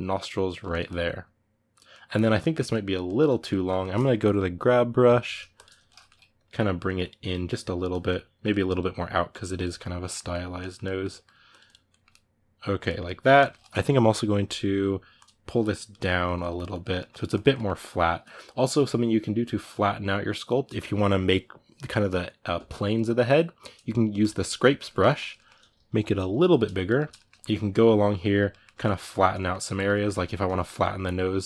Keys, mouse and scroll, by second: 4.8 g, 5.0 f, 5.6 middle click, 6.1-7.2 drag, 7.2-8.2 middle drag, 8.2-9.5 drag, 9.5 middle click, 10.1 click, 10.3 middle click, 11.3 click, 11.6-14.2 ctrl+middle drag, 14.2 f, 15.3 click, 15.7 middle click, 16.0 click, 16.7 middle click, 17.1 click, 17.3-24.0 middle drag, 24.0 click, 24.4-26.0 ctrl+middle drag, 26.0 f, 26.5 click, 26.7 shift+middle click, 27.2-28.3 drag, 28.3 middle click, 28.9 click, 29.1 middle click, 29.5 click, 29.7 middle click, 30.6-31.4 drag.